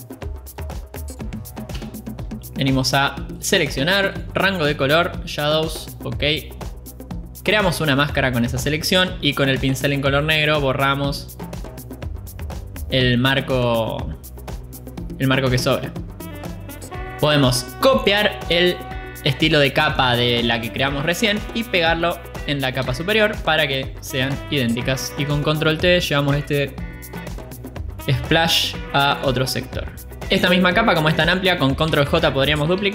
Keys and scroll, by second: 3.3 Return, 11.1 b, 25.8 ctrl+t, 30.2 Return.